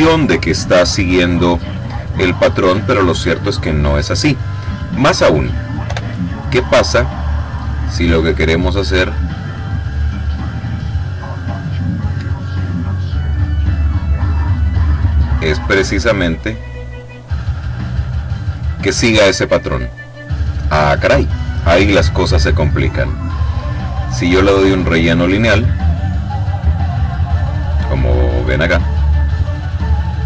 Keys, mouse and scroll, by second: 4.7 click, 5.6 Delete, 7.1 click, 8.3 click, 9.8-11.1 drag, 11.5 click, 14.2-15.2 drag, 15.3-16.4 drag, 16.6 click, 17.5 click, 22.4 click, 23.8 click, 25.0 click, 26.8-28.9 drag, 29.1-30.2 drag.